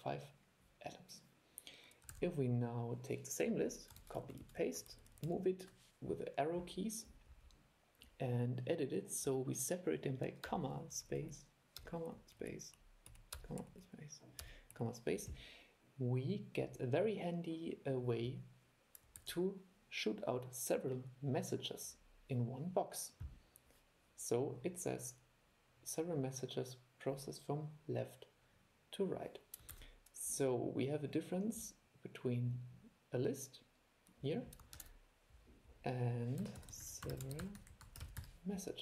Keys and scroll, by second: 2.3 super+e, 4.2 super+c, 4.6 super+v, 19.3 super+e, 29.9 super+e, 34.9 super+5.